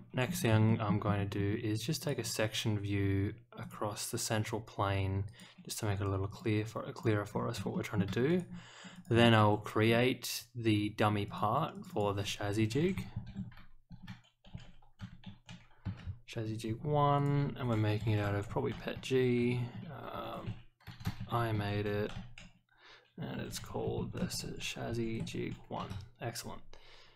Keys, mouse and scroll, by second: 0.2 scroll up 1, 0.6 shift+middle click, 1.0-1.3 scroll up 1, 2.0 click, 2.9 scroll up 2, 3.6 click, 5.2 click, 6.3 click, 6.9 click, 7.3 scroll down 1, 7.7 shift+middle click, 8.2 click, 8.9 click, 11.2 click, 11.7 click, 11.9 click, 17.1 click.